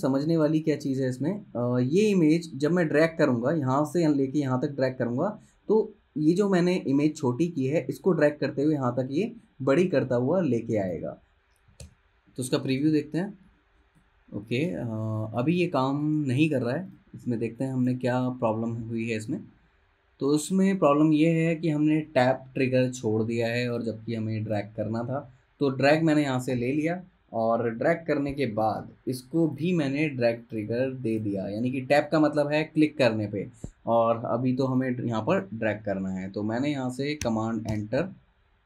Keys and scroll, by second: 0.2 space, 12.0 super+Return, 37.8 super+Return.